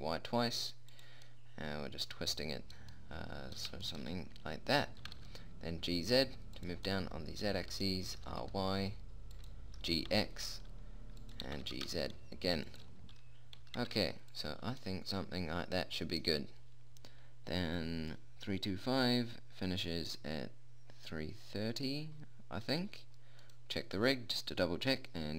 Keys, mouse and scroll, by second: 5.4 g, 6.3 middle click, 8.6 r, 9.8 ctrl+z, 9.8 g, 10.1 g, 11.9 g, 14.0 g, 15.2-17.1 middle drag, 18.5-20.3 drag, 20.3-21.9 middle drag, 23.8-25.3 right drag.